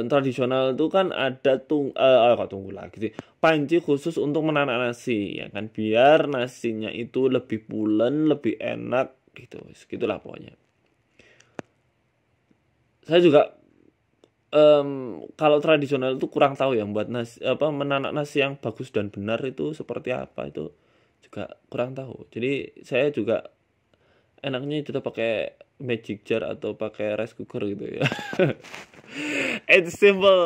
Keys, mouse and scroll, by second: 2.6-3.2 scroll down 2, 2.8 right click, 3.2 scroll up 1, 3.7 scroll up 3, 3.8 ctrl+z, 4.1 ctrl+z, 5.0 ctrl+b, 8.2 Tab, 8.5 Tab, 9.9 shift+middle click, 10.4 click, 11.2 e, 11.7 s, 13.5 shift+middle click, 13.8 scroll down 2, 14.4 shift+middle click, 14.8 Tab, 15.6 middle click, 16.7 w, 17.3 middle click, 18.0 KP_1, 18.2 Tab, 18.5 shift+middle click, 19.0 middle click, 19.5 KP_1, 20.0 e, 20.4 s, 21.0 middle click, 21.9 KP_1, 22.4 e, 24.7 s, 26.3 Tab, 26.4 middle click, 27.6 scroll up 2, 27.6 scroll down 1, 27.8 middle click, 29.8 Tab, 30.0 middle click.